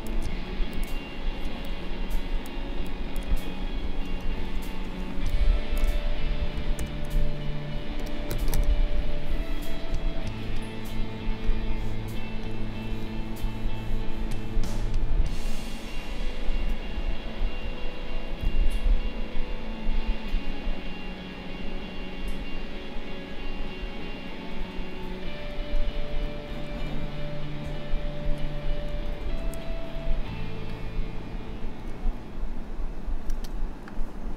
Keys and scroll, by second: 4.1 ctrl+=, 5.0 space, 6.8 shift+b, 17.4 [, 25.8 ctrl+-, 28.9 ctrl+-, 30.3 space.